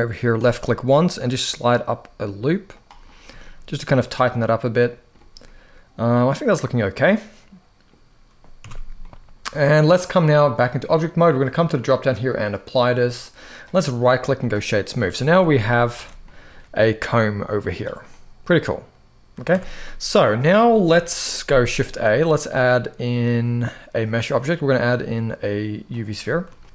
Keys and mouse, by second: 2.4 click, 3.1 shift+middle click, 4.4 middle click, 5.1-7.6 middle drag, 8.3 Tab, 8.7-9.4 middle drag, 11.1-12.2 drag, 12.9-13.2 middle drag, 13.6-14.2 right drag, 14.6-14.9 middle drag, 15.0 Tab, 15.4 middle click, 15.7 alt+a, 16.0 middle click, 17.4 click, 17.8-19.1 middle drag, 19.2 Tab, 19.5-20.2 middle drag, 20.7 KP_1, 21.5 shift+a, 26.3 shift+middle drag.